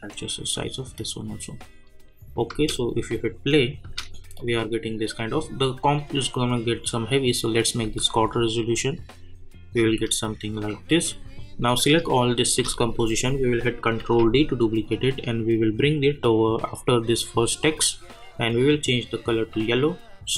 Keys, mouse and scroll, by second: 2.5 space, 4.4-5.8 drag, 7.8 space, 9.9 space, 10.5 click, 12.4 shift+click, 14.0 ctrl+d, 15.5-17.6 drag.